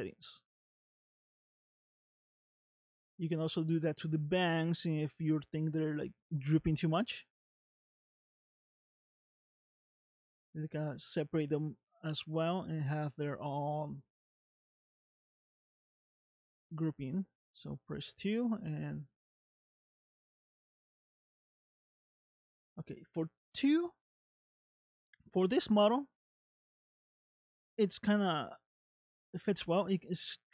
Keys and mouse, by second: 0.6 middle click, 1.6 space, 3.3 space, 5.0-6.5 middle drag, 7.2 middle click, 8.9 space, 13.4 space, 15.1-16.3 drag, 17.0 space, 22.8 space, 23.2 middle click, 25.6 shift+middle click, 26.3 middle click, 29.6 shift+middle click.